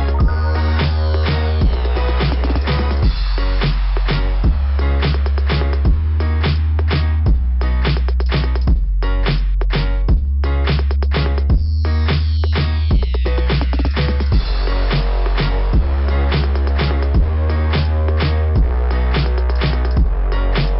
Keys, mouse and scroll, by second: 1.6 click, 1.7 click, 2.9 click, 4.9 click, 12.4 click, 12.7 click, 13.3 click, 13.6 click, 16.7 click.